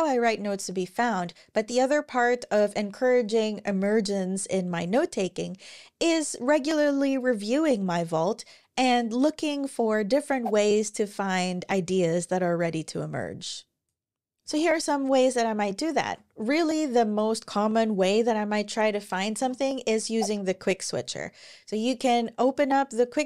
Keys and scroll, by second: 14.2 super+w, 15.8 super+o, 18.4 q, 19.1 BackSpace, 20.1 Escape.